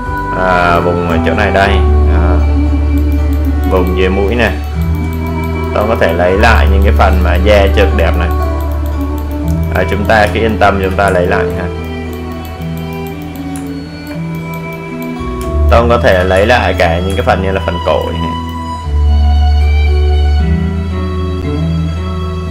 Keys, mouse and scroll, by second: 1.5 click, 9.6 space, 9.9 click, 10.2 space, 10.7 alt+right click, 11.4 click, 13.6 alt+right click, 14.3 click, 15.4 space, 15.7 click, 15.9 space, 16.6 alt+right click, 17.1-18.7 alt+right drag.